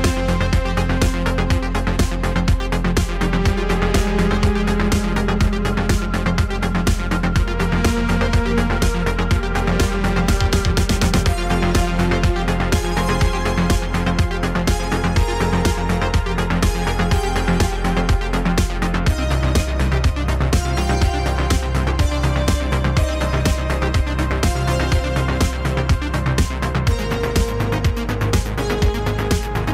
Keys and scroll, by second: 1.1 ctrl+a, 4.6 Tab, 5.2 Tab, 6.6 ctrl+a, 7.2 g, 8.2 shift+z, 9.3 Tab, 11.0 Tab, 12.5 ctrl+a, 14.0 Tab, 14.5 Tab, 18.5 ctrl+a, 22.6 ctrl+a, 24.9 ctrl+s, 27.1 ctrl+a.